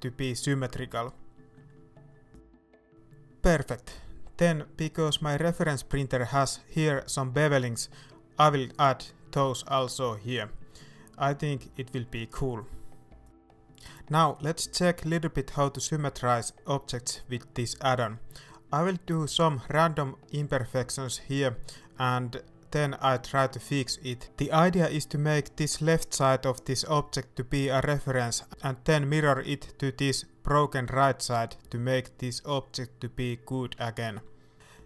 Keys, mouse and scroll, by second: 0.1 middle click, 1.0 right click, 1.1 middle click, 1.6 f, 1.7 middle click, 2.0 right click, 2.5 f, 2.6 scroll down 1, 2.7 middle click, 2.8 Tab, 2.9 middle click, 3.0 Tab, 3.1 middle click, 3.2 shift+right click, 5.8 ctrl+b, 9.0 shift+click, 9.4 middle click, 9.9 Tab, 10.1 middle click, 11.3-14.5 shift+middle drag, 14.5 right click, 14.7 Tab, 14.9 middle click, 15.4-15.7 scroll up 2, 15.7 middle click, 16.0 alt+a, 16.4 right click, 16.7 middle click, 17.5 g, 18.7 right click, 21.8 click, 22.4 right click, 22.7 middle click, 23.0 g, 23.8 scroll down 1, 24.0 middle click, 24.3-25.1 scroll up 1, 25.1 middle click, 25.7 Tab, 26.1 shift+middle click, 26.7 Tab, 27.0 middle click, 27.3 scroll up 1, 27.7 alt+a, 28.1 shift+middle click.